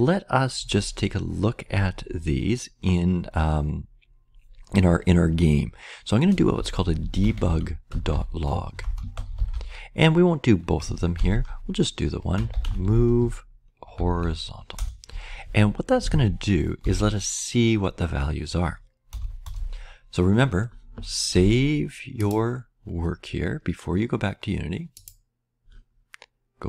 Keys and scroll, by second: 6.2-14.4 typing, 14.7 Return, 16.0 Right, 16.5-17.2 typing, 19.0 Return, 19.4 Return.